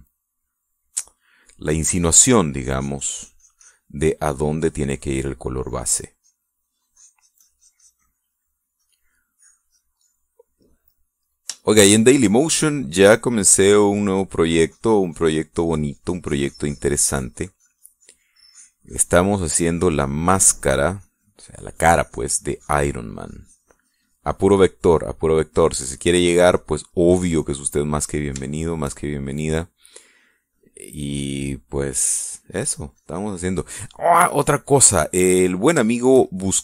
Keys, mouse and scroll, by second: 2.6-5.1 drag, 4.7 middle click, 5.3-9.7 drag, 10.7-13.0 middle drag, 14.5-25.6 drag, 25.6-28.1 middle drag, 28.3-30.2 middle drag, 30.6-32.3 drag, 31.4 middle click, 32.7-35.4 drag, 35.5 middle click, 36.5 shift+middle click.